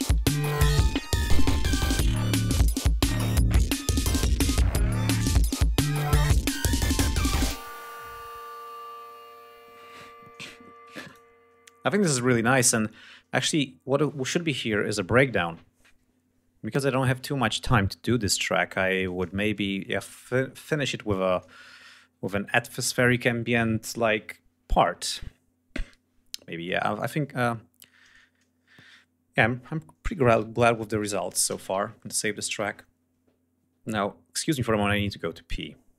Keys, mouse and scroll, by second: 0.4 ctrl+scroll down 2, 0.7 ctrl+scroll up 2, 2.6 ctrl+scroll down 2, 3.1-4.2 ctrl+scroll up 5, 5.0 ctrl+scroll up 2, 6.4 scroll down 2, 7.9 ctrl+scroll down 2, 9.0 scroll down 2, 10.9 space, 11.1 click, 12.7-13.1 scroll down 2, 14.8 scroll up 2, 17.7 scroll down 2, 18.1 scroll up 2, 18.4-18.7 scroll down 2, 21.7 ctrl+scroll down 2, 27.1-27.4 scroll down 2, 28.4 scroll down 2, 30.4 Home, 31.5 ctrl+s, 31.9 ctrl+scroll down 2.